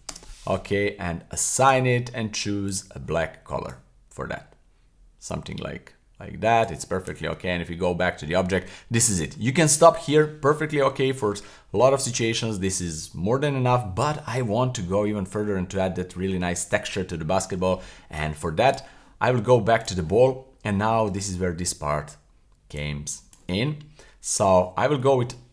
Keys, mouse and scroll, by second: 1.6 click, 2.6 click, 7.3 Tab, 8.4 scroll down 1, 8.6-9.1 middle drag, 9.3 scroll down 1, 9.6-10.3 middle drag, 10.5-11.2 middle drag, 11.2 scroll down 1, 11.7-12.3 middle drag, 13.7-14.2 scroll up 1, 17.6 scroll up 1, 18.0-18.4 middle drag, 18.7 right click, 19.8 click, 20.4 scroll down 1, 20.8 shift+middle click, 22.8 click, 23.6 shift+middle click.